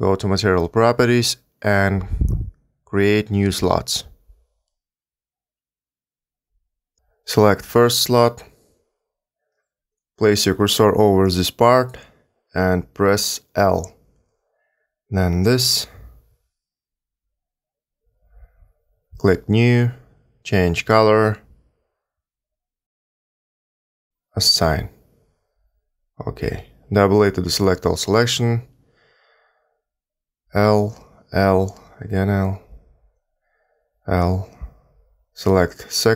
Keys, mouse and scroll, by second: 4.0 click, 4.5 click, 5.1 click, 5.6 click, 6.1 click, 8.1 click, 11.2 a, 11.3 a, 13.6 l, 15.2 l, 18.9 click, 20.0 click, 24.8 click, 26.4 click, 28.4 a, 28.5 a, 30.2 l, 31.6 l, 32.9 l, 34.4 l.